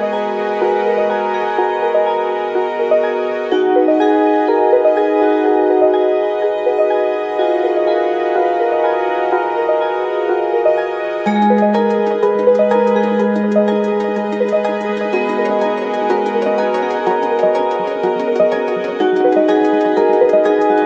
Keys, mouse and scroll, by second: 0.1 Tab, 0.3 Tab, 0.6 Tab, 0.8 Tab, 0.9 a, 1.3-5.6 drag, 5.6 middle click, 5.9-8.0 drag, 7.3 s, 8.0 middle click, 8.5 click, 8.9-12.4 middle drag, 9.2 g, 10.7 g, 12.0 Tab, 12.4-16.9 drag, 16.9 Tab, 16.9-20.8 middle drag, 18.2-20.8 drag, 18.5-20.8 right drag.